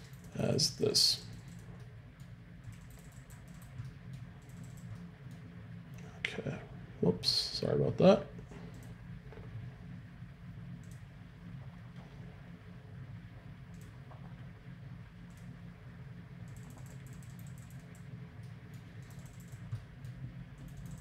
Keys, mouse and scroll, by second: 13.7-15.5 drag, 18.4-21.0 middle drag.